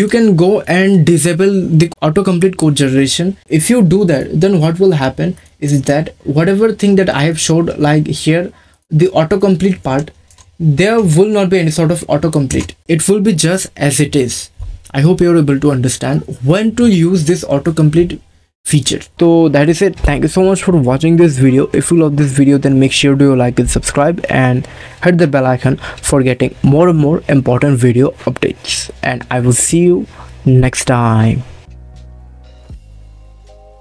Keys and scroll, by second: 10.3 \, 10.9 BackSpace, 12.5 Return.